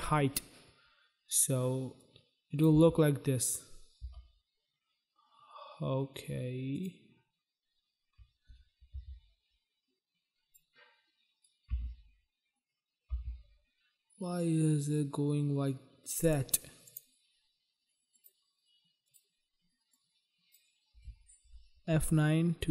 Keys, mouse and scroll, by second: 1.8 click, 2.8 space, 4.1 space, 6.8 click, 6.9 click, 9.0 u, 10.5 click, 11.7 space, 13.2 space, 16.2 click, 16.3 click, 16.9 click, 17.0 click, 18.2 click, 18.3 click, 18.9 click, 19.2 click, 20.0 click, 22.1 F9.